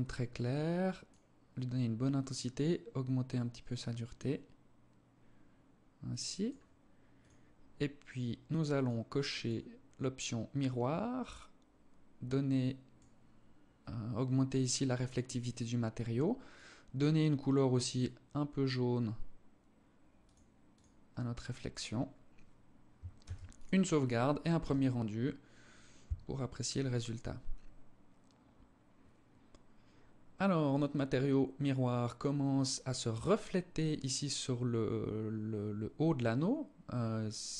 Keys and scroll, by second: 22.5 ctrl+s.